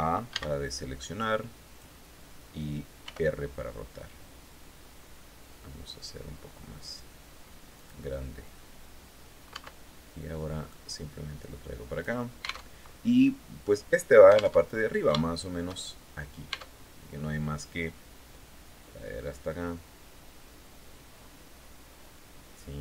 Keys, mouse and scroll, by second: 0.6 click, 2.5 r, 4.4-4.8 scroll down 1, 7.2 click, 9.0 Tab, 10.1-11.7 drag, 12.2 alt+Tab, 14.0 alt+Tab, 14.6 shift+click, 16.0 Tab, 18.7-22.8 drag.